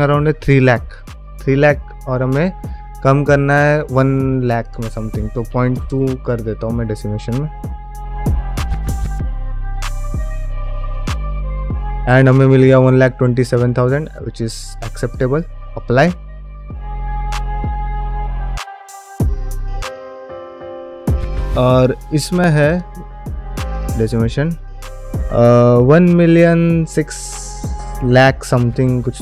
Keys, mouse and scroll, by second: 7.0 click, 23.0 click, 23.0 middle click, 24.6-25.3 middle drag.